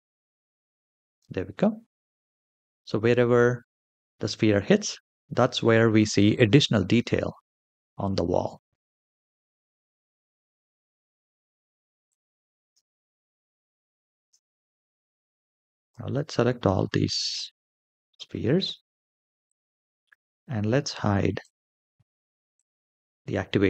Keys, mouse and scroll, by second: 2.2-3.4 middle drag, 4.8 middle click, 5.9-6.6 middle drag, 6.8-7.2 scroll down 3, 7.5-7.9 middle drag, 8.2-8.7 shift+middle drag, 8.9 middle click, 11.0 space, 11.8 click, 12.4 space, 13.9 space, 15.5 click, 16.1-16.5 scroll down 2, 16.5 shift+middle drag, 17.1 click, 19.2 ctrl+click, 21.1-22.5 drag, 22.5 typing.